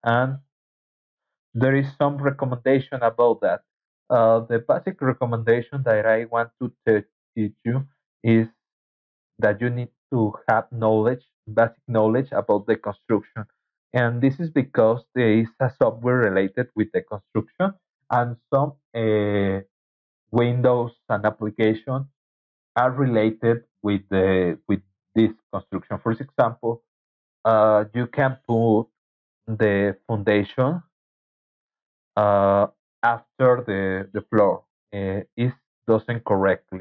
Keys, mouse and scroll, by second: 0.9 Right.